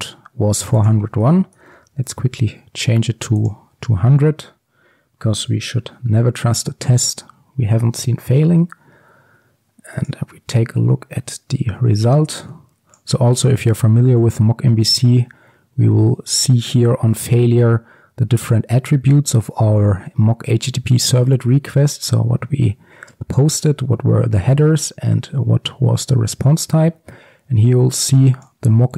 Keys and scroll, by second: 2.2 ctrl+s, 3.5 ctrl+F5.